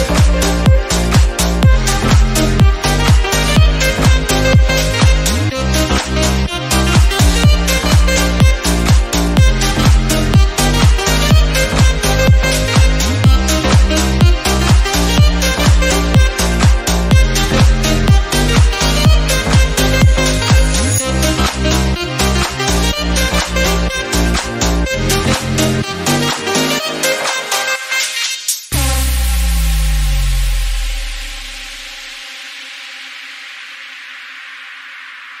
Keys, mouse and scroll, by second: 0.1-0.4 scroll down 1, 0.4 middle click, 1.2 scroll up 1, 1.4-3.1 middle drag, 3.1 Tab, 3.4 click, 3.5 middle click, 3.8 click, 4.5 middle click, 4.9 click, 5.4 shift+middle click, 6.3-7.4 shift+drag, 7.4 Tab, 7.5 click, 7.6 scroll down 3, 7.7 middle click, 8.2-8.7 scroll up 4, 8.4 shift+middle click, 8.7 click, 8.9 Tab, 9.1 click, 9.7 Tab, 10.1 Tab, 10.4 scroll down 3, 10.6 Tab, 10.8 middle click, 11.0 scroll up 2, 11.2 Tab, 11.4 click, 12.0 Tab, 12.2-12.5 scroll down 1, 12.5 scroll up 1, 12.9 ctrl+z, 13.1 ctrl+z, 13.5 Tab, 13.6 scroll down 2, 13.6 middle click, 14.4 scroll up 1, 14.5 middle click, 15.1 Tab, 15.4-16.5 drag, 16.5 Tab, 16.6 scroll down 2, 16.7 middle click, 17.0 scroll up 1, 17.2 middle click, 17.6 Tab, 17.8-18.9 drag, 19.1 middle click, 19.4 Tab, 19.6 scroll down 3, 19.6 middle click, 20.4-21.1 scroll up 2, 21.1 shift+middle click, 21.6 Tab, 22.5 Tab, 22.9 click, 23.6 scroll down 1, 24.0 scroll up 1, 24.3 shift+middle click, 25.2 click, 26.7-28.8 drag, 28.8 scroll down 2, 29.1 middle click, 29.4 click, 29.6 scroll down 1, 29.7 middle click, 30.3 scroll up 1, 30.6 middle click, 31.4 KP_3, 31.9 scroll up 1, 32.0 click, 32.9 s, 34.2 click, 34.9-35.4 scroll down 1.